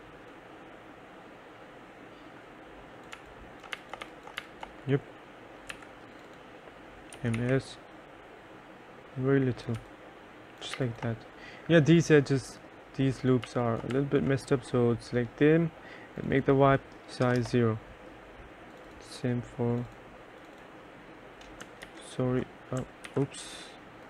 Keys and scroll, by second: 3.3-5.9 typing, 7.1-8.0 typing, 9.9 3, 10.9 2, 13.6 2, 14.1 3, 17.4 0, 17.5 Return, 22.0 ctrl+z, 23.2 ctrl+s.